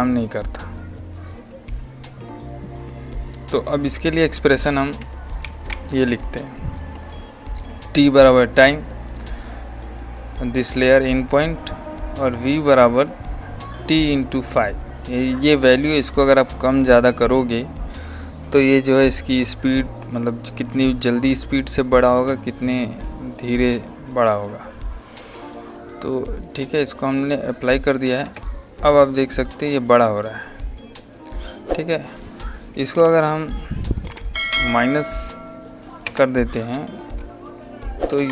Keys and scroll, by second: 5.3 ctrl+v, 28.1 space, 38.0 KP_Subtract, 38.1 Delete.